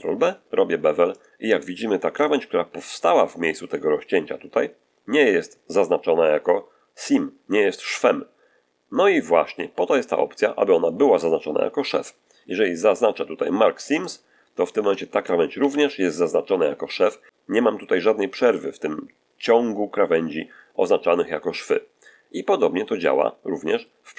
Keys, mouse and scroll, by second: 1.0 click, 13.9 click, 15.4 a.